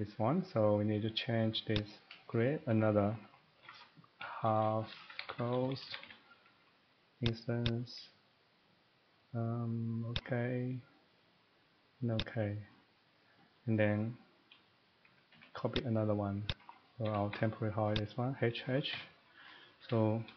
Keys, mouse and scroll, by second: 1.7 click, 3.5-4.2 typing, 5.4-6.0 typing, 12.2 click, 13.1 middle click, 14.0 middle click, 15.0 typing, 15.7 click, 16.5 click, 17.1 Escape, 17.3 Escape, 18.0 click, 18.4-20.3 typing, 19.4 middle click, 19.5 middle click, 19.6 middle click, 19.8 Escape, 20.2 middle click.